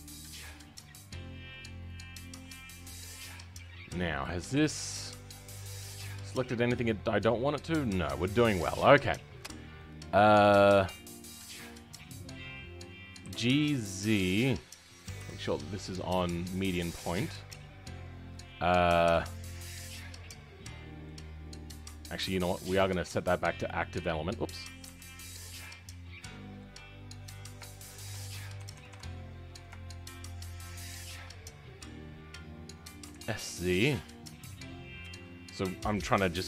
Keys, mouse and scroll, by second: 1.0 shift+middle click, 1.8 shift+click, 2.4-2.9 scroll down 3, 2.9-3.9 middle drag, 3.9-4.2 scroll down 2, 4.2 shift+middle click, 4.9-5.3 scroll down 2, 5.3-13.2 middle drag, 13.2 g, 16.4 ., 17.0 shift+middle click, 17.4-18.2 scroll up 2, 18.2-21.2 middle drag, 21.2-23.6 scroll up 2, 23.6 ., 25.6 ., 26.1 middle click, 26.9-27.6 scroll up 2, 27.6 shift+middle click, 28.5 w, 30.3 shift+click, 30.7 shift+click, 31.3-33.0 scroll down 2, 33.0 s, 34.9 KP_1.